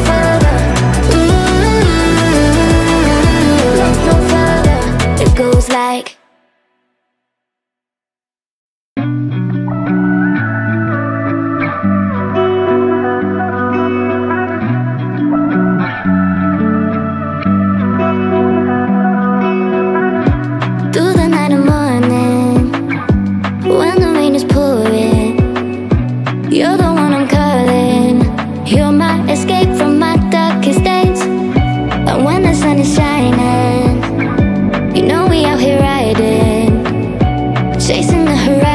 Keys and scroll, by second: 5.5 Right, 10.0 Up, 11.3 Down, 28.8 Delete, 30.1 BackSpace, 32.9 m.